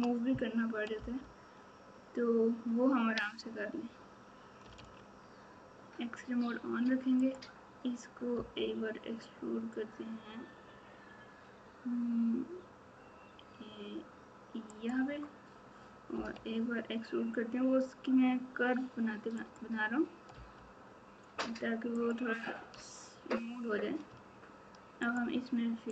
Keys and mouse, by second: 16.1 e, 20.3 e, 25.1 shift+click.